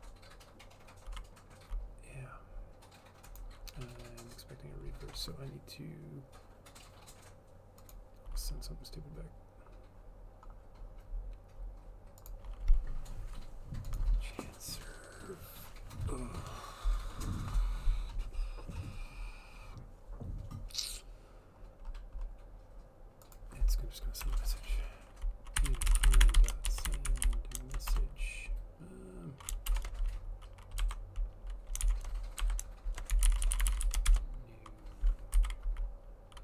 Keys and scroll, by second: 24.3 Return, 25.5-27.9 typing, 28.0 Return, 29.8 shift+7, 31.0-34.8 typing, 35.5 Down.